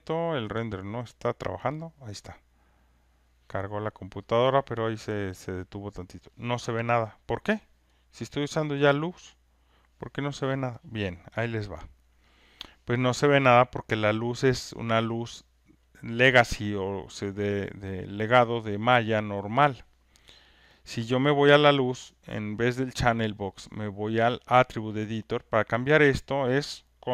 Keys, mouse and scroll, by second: 8.3-13.6 drag, 24.9 click.